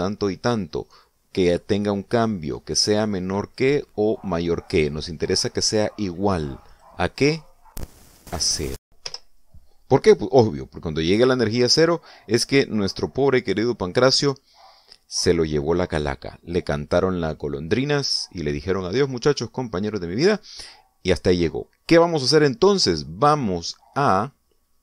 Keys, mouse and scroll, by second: 6.5 click, 7.5 click, 9.0 0, 9.9 Return, 21.1 click.